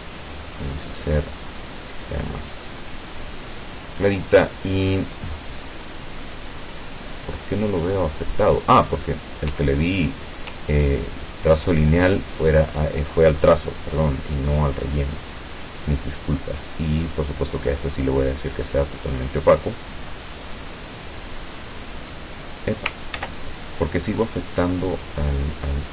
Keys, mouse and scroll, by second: 1.8-3.4 drag, 6.7 click, 8.8 click, 10.9-11.2 ctrl+scroll up 2, 11.6-12.7 ctrl+drag, 17.2 click, 18.8-19.8 drag, 23.2 ctrl+z.